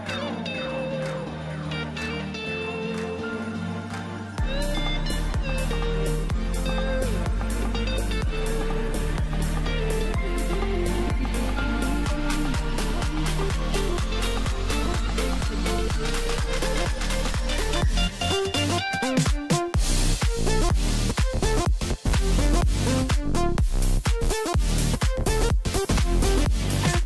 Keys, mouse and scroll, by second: 0.3 click, 0.5 click, 2.4 click, 3.9 click, 4.1 click, 5.6 shift+click, 5.8 shift+click, 7.1 p, 7.7 Tab, 9.2 click, 12.6 Tab, 13.4 click, 14.5 l, 15.6 p, 16.8 Tab, 18.1 click, 19.2 click, 20.0 click, 20.2-23.2 drag, 24.0 click, 25.1 click, 25.3-27.0 drag.